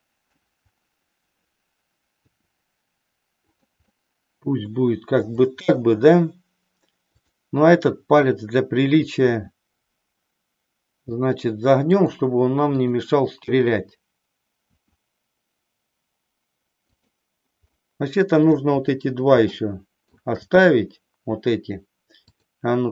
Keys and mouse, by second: 2.2 r, 3.6 click, 3.9-5.2 middle drag, 9.2 r, 12.1 click, 14.8 r, 17.0 click, 17.8 middle click, 19.6 shift+middle click, 22.2-22.9 drag.